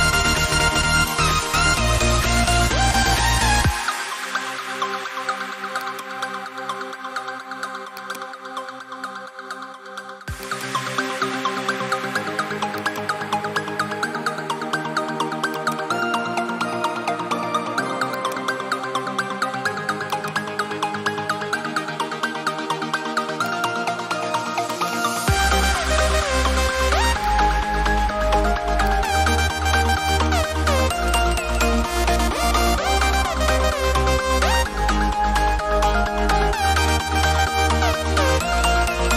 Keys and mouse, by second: 1.5 click, 15.5 click.